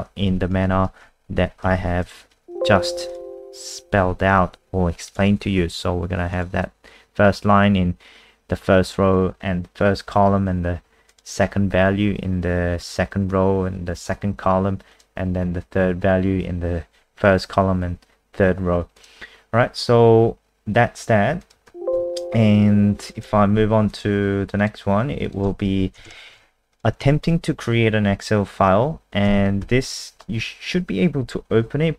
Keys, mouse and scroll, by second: 0.3 ctrl+a, 0.7-1.0 typing, 1.7 Escape, 1.8 Escape, 2.1-3.0 typing, 3.1 click, 4.0-4.9 typing, 5.1 click, 21.7 ctrl+w, 22.1 n, 23.2 click, 23.5 alt+F4, 23.9 click, 25.8 Left, 26.1 shift+Home, 26.3 ctrl+c, 26.7 click, 29.2 ctrl+s, 29.6 F5.